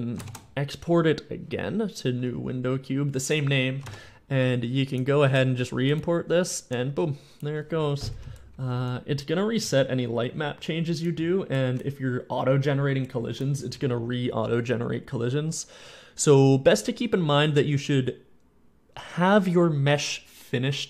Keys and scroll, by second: 0.1 ctrl+shift+e, 3.7 alt+Tab, 4.2 alt+Tab, 6.6 d, 7.1 d, 8.4 d, 9.4 a, 10.2 a, 10.2 w, 11.5 d, 13.1 s.